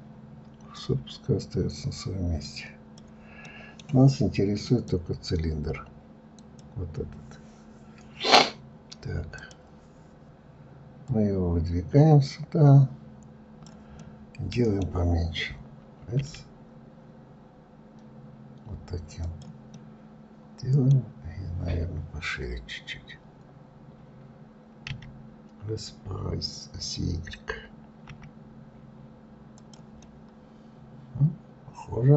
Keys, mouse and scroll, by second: 0.7-3.4 drag, 3.4-4.6 middle drag, 4.6 click, 6.2 click, 9.3-11.2 drag, 13.9-16.1 middle drag, 16.1 s, 19.7-22.7 middle drag, 29.9-32.1 middle drag.